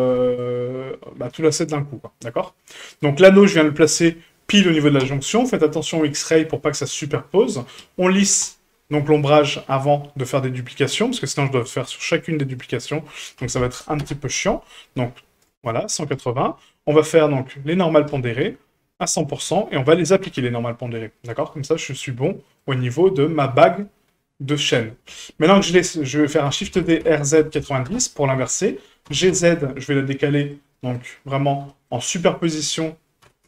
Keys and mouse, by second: 0.1 middle click, 1.1 a, 6.0 shift+middle drag, 7.8 w, 10.6 click, 12.5 click, 12.8-14.5 drag, 16.3-18.1 drag, 19.0 click, 20.2 ctrl+a, 21.1 middle drag, 21.6 shift+middle drag, 22.2-22.6 shift+middle drag, 23.4 shift+middle drag, 26.5 shift+d, 29.0 g, 30.7 middle drag, 31.7 shift+middle drag, 32.4 shift+middle drag, 33.2 g.